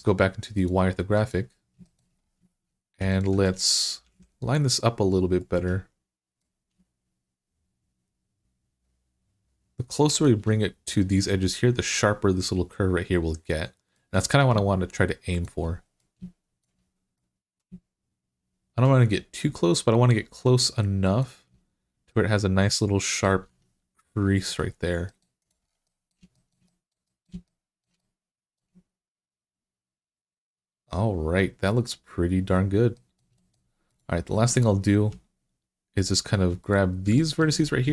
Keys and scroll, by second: 3.9 g, 23.3 Tab, 34.2 Tab.